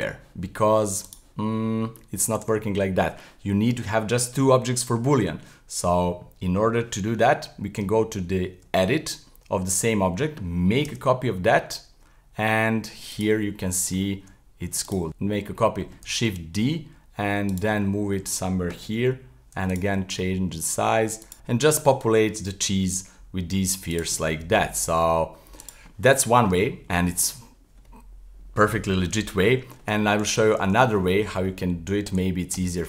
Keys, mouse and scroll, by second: 1.5-2.3 middle drag, 2.5 z, 3.1-6.2 middle drag, 7.8 Tab, 9.3-10.9 middle drag, 10.9 shift+d, 13.4 middle click, 14.2 s, 15.1 middle click, 16.1 shift+d, 17.8-18.9 middle drag, 18.9 g, 19.9 s, 21.3-22.9 middle drag, 22.9 g, 24.2 middle click, 24.7 g, 25.9 middle click, 26.5 Tab, 26.9-30.0 middle drag, 30.3-32.8 typing.